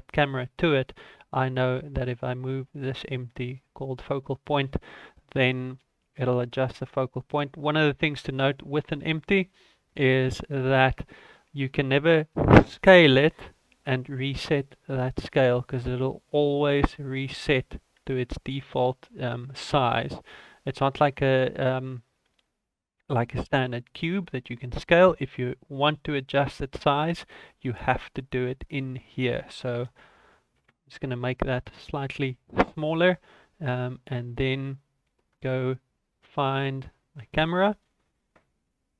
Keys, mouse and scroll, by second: 0.3 ctrl+s, 8.6-10.5 scroll up 6, 10.5 click, 12.5 s, 14.3 ctrl+a, 16.6 s, 18.0 a, 18.7 right click, 20.4 ctrl+z, 21.4 ctrl+z, 22.5 ctrl+z, 28.6 click, 30.1 KP_0, 34.2 ctrl+s, 34.2-34.7 scroll up 2, 35.0 shift+middle click, 36.5 right click, 36.9-37.6 scroll up 5.